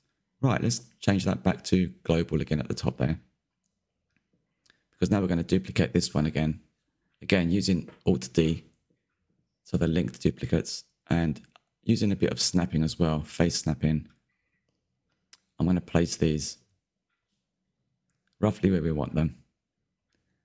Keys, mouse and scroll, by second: 0.6-3.3 shift+middle drag, 3.3 click, 4.3-5.4 scroll up 2, 5.4 alt+d, 7.1-9.3 drag, 9.8-10.5 middle drag, 10.5-10.9 shift+right drag, 10.9 shift+s, 11.3 KP_Decimal, 11.5-12.0 scroll down 2, 11.6 middle drag, 12.0-15.6 middle drag, 15.6 click, 16.1 click, 16.8-17.3 middle drag, 17.3 click, 17.7 ctrl+z, 18.0 click, 19.6 click, 19.8 scroll down 4, 19.9 middle drag, 20.1 click, 20.2-20.4 middle drag.